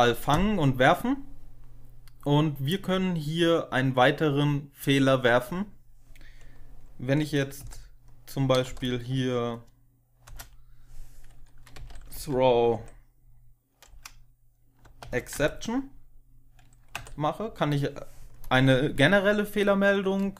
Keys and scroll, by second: 7.5 Down, 8.6 End, 10.2 Return, 11.4-12.6 typing, 12.6 Tab, 13.8-15.4 typing, 16.8 Tab.